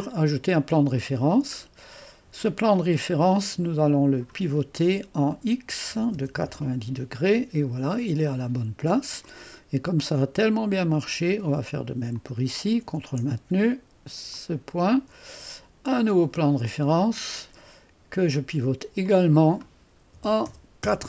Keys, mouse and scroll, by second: 0.0 click, 1.0-3.2 scroll down 1, 3.6-4.7 drag, 6.1 0, 6.5 Return, 8.3-9.6 drag, 9.3 typing, 9.6-11.2 scroll up 1, 12.2 click, 14.4 click, 16.6 click, 17.4-18.2 typing, 19.1 click, 20.1-20.9 typing.